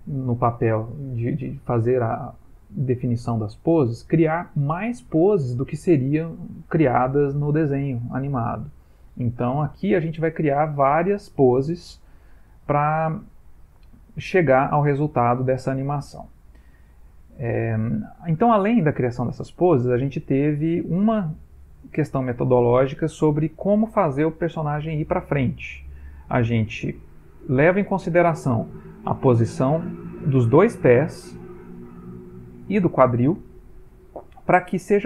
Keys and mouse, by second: 10.9 click, 30.1 click, 31.4 shift+click, 33.1 shift+click.